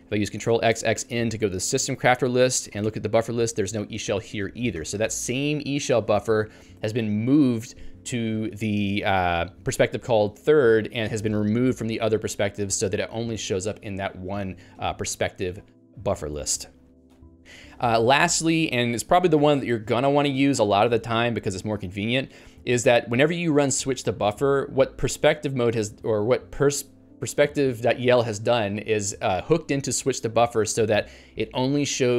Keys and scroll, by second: 4.9 ctrl+g.